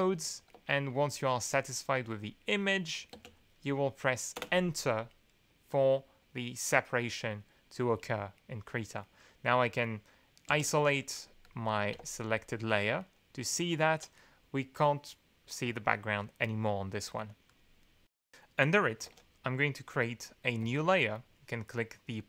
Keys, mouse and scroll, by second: 0.5 Tab, 2.0-2.4 scroll up 2, 2.5 scroll up 2, 3.1 space, 4.4 Return, 10.5 alt+2, 11.1-11.9 drag, 11.9 alt+2, 17.4 click, 19.0 alt+2, 20.6 n.